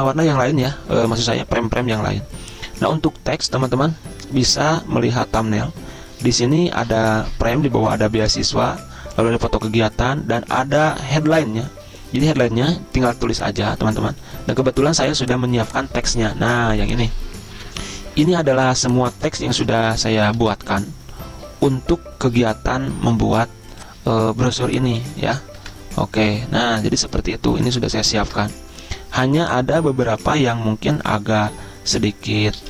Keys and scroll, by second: 20.6 ctrl+c, 26.0 ctrl+v, 28.6 ctrl+g.